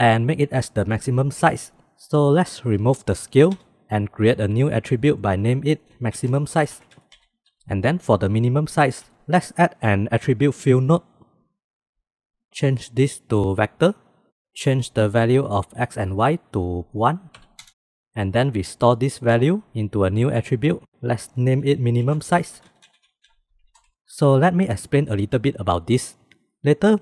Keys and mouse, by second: 1.9 click, 8.6 shift+a, 13.7 drag, 15.5-17.7 drag.